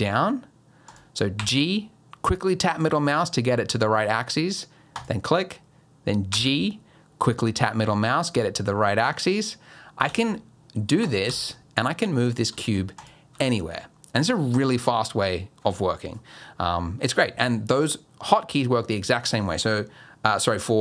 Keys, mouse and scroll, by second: 1.4 g, 6.3 g, 10.1 g, 11.2 g, 12.5 g, 13.3 g.